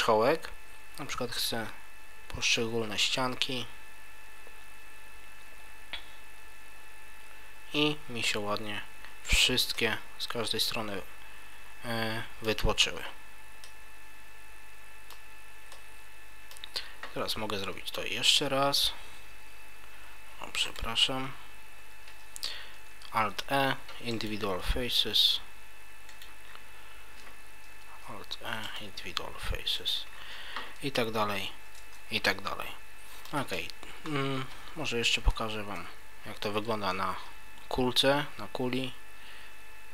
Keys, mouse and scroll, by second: 9.4 click, 9.7 middle click, 13.6 middle click, 15.7 middle click, 18.2 e, 20.7 right click, 22.1 ctrl+z, 23.2 alt+e, 26.2 click, 26.5-27.7 scroll down 2, 27.9 alt+e, 27.9 scroll down 1, 30.1 click, 30.1-31.4 scroll down 2, 31.4 scroll down 1, 31.8 Tab, 32.3 middle click, 34.1 scroll up 2, 35.2 Delete, 36.9 shift+a.